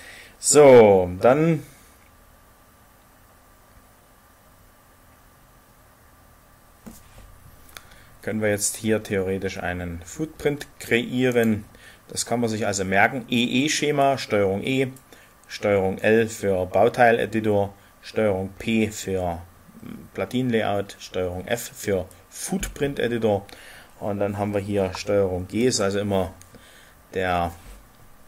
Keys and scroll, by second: 25.5 ctrl+g.